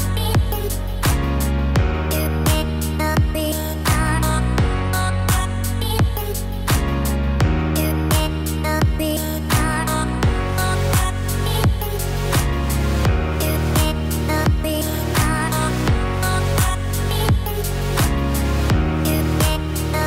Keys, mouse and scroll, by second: 0.9 click, 2.1-3.1 scroll down 2, 3.7 ctrl+z, 4.4 ctrl+z, 4.6 ctrl+z, 5.1 ctrl+z, 5.5 ctrl+z, 5.7 ctrl+z, 5.9 ctrl+z, 6.3 ctrl+z, 6.8 ctrl+z, 7.1 ctrl+z, 7.2-7.9 ctrl+z, 9.5 ctrl+z, 11.5 scroll down 3, 11.8 middle click, 12.7 Tab, 14.7 click, 15.7 middle click, 17.1 Tab, 17.9 middle click, 19.1 a.